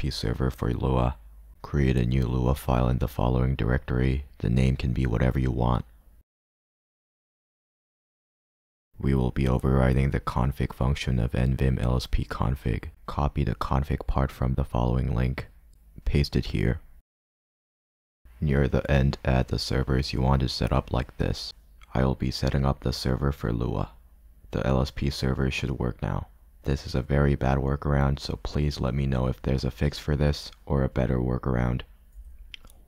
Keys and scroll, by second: 5.1 j, 8.6-9.1 typing, 18.2 o, 24.1 g.